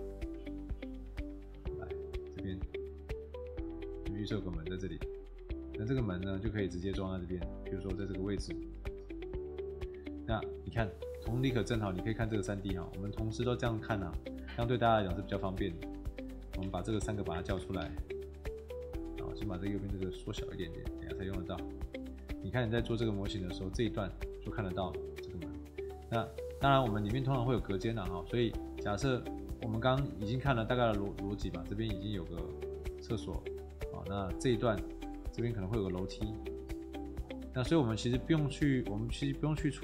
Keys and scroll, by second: 8.5 space, 9.6 Escape, 16.6 w, 16.8 t, 17.5 w, 17.7 t, 26.9 Escape, 32.7 Escape.